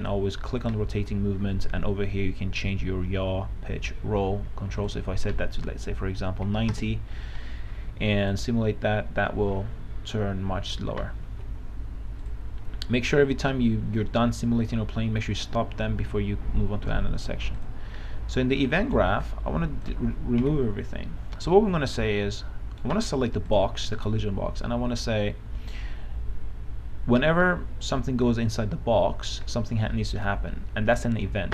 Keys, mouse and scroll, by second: 6.8 KP_9, 6.9 KP_0, 8.5 click, 11.6 Escape, 12.5 click, 18.9 right click, 19.5 click, 20.6 Delete, 21.7-23.3 right drag, 23.7-31.5 drag.